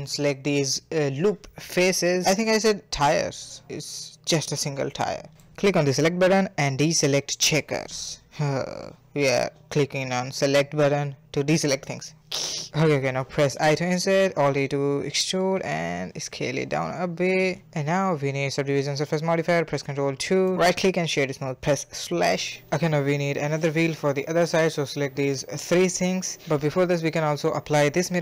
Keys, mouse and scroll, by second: 0.0 alt+shift+click, 0.3 middle click, 0.6 alt+shift+click, 0.9 alt+shift+click, 1.3-2.7 middle drag, 3.2-4.4 middle drag, 4.6-13.6 drag, 13.6 middle click, 14.8 click, 15.1 alt+e, 15.4 s, 16.0-18.0 middle drag, 18.0 Tab, 18.3 middle click, 18.7 ctrl+2, 19.0-19.5 middle drag, 19.5-20.7 right drag, 20.8 /, 21.2 a, 21.4 a, 21.7-23.6 middle drag, 23.6 click, 23.8 shift+click, 24.2 shift+click, 24.5-25.5 middle drag, 25.8 click, 27.4 ctrl+a.